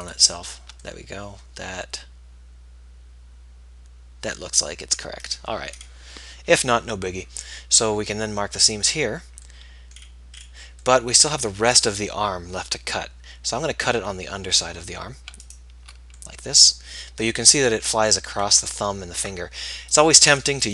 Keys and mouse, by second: 1.3 right click, 5.2-12.8 middle drag, 6.6 z.